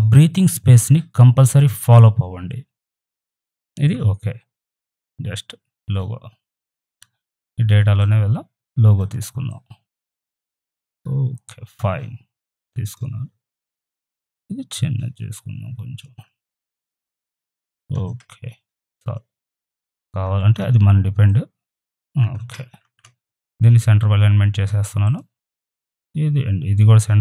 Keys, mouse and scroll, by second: 7.9 click, 8.9 right click, 9.2-12.6 drag, 12.6 ctrl+t, 13.7-20.2 alt+drag, 20.2 ctrl+t, 21.2-22.8 alt+drag, 22.8 ctrl+a, 25.0 click, 26.7 right click.